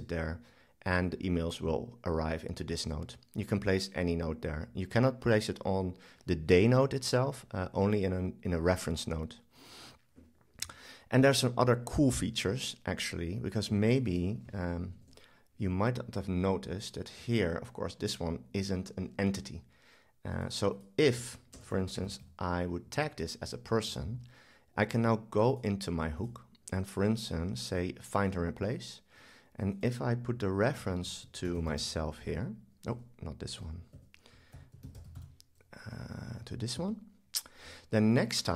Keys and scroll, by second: 0.1 super+v, 15.0 shift+super+BackSpace.